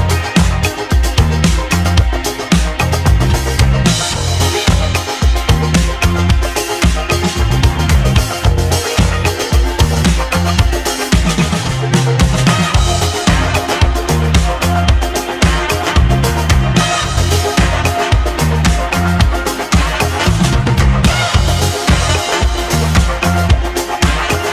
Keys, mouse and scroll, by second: 0.1-1.4 scroll up 1, 1.4-2.0 scroll down 2, 2.0-2.9 shift+middle drag, 2.9 g, 5.5 click, 6.6 ctrl+z, 7.4 g, 9.8-10.7 scroll up 5, 10.7-11.8 shift+middle drag, 11.8 Tab, 13.4 Tab, 14.0 Tab, 14.6 click, 15.0 click, 15.7 g, 19.2-20.4 scroll down 4, 20.4 g.